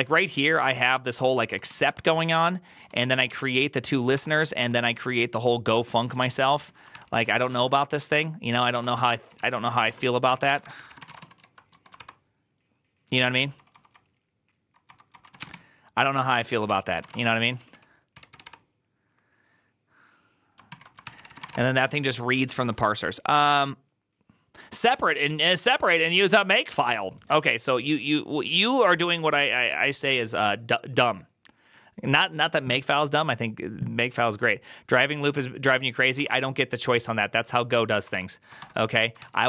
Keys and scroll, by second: 0.0-11.5 typing, 7.9 ctrl+d, 11.8 ctrl+d, 13.3-18.8 typing, 16.5 ctrl+c, 20.6 ctrl+o, 20.7-21.8 typing, 38.0 ctrl+c, 38.0-39.4 typing, 38.8 Tab, 39.1 ctrl+c, 39.2 ctrl+c.